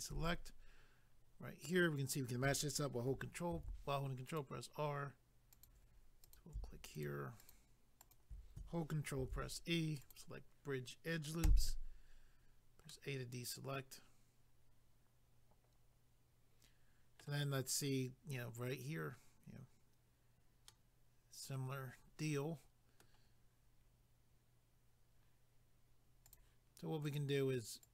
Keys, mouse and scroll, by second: 0.1 a, 3.5 ctrl+r, 4.3 click, 4.4 click, 5.5 click, 5.6 click, 6.2 click, 6.4 click, 6.9 shift+click, 7.1 shift+click, 7.4 shift+click, 8.0 shift+click, 9.2 ctrl+e, 10.0 click, 11.4 a, 12.9 middle click, 20.6 middle click, 26.3 click, 26.4 click, 27.0 click, 27.2 click, 27.8 click.